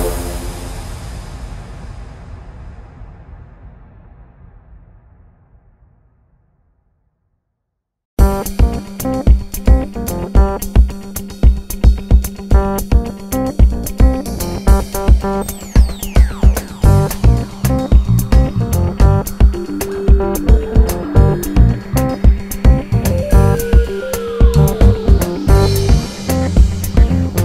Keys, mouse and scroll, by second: 0.7 click, 1.1 g, 3.0-4.4 scroll down 1, 4.4 e, 7.0 KP_7, 7.8 g, 11.6 click, 12.4 g, 13.6 click, 14.2 s, 17.0 ctrl+right click, 17.4 r, 18.0 click, 18.8 KP_1, 19.6 s, 20.0 click, 20.2 r, 21.8 click, 22.6 g, 25.0 click, 25.1 g, 27.2 click.